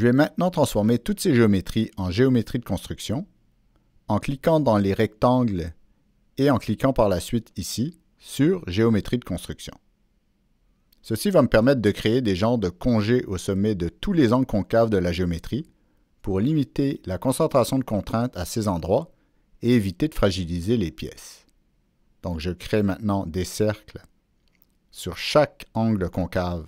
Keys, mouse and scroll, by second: 0.5 ctrl+click, 11.4 click, 18.8-19.1 scroll down 1, 19.7 ctrl+middle click, 21.2-21.6 right drag, 23.4 click, 23.5 ctrl+middle click, 24.0 click, 25.9 click, 26.5 click.